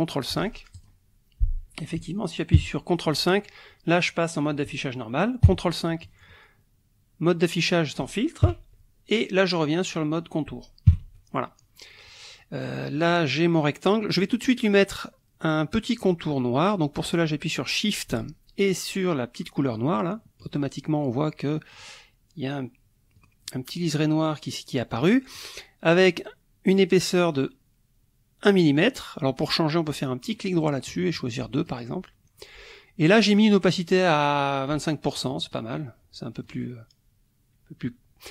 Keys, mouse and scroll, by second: 0.7 click, 2.5 ctrl+KP_5, 5.5 ctrl+KP_5, 8.5 ctrl+KP_5, 10.9 ctrl+KP_5, 19.9 shift+click, 21.7 click, 23.1 click, 30.4 right click, 31.6 click, 33.8 right click, 35.2 click, 35.5 click, 36.4 click.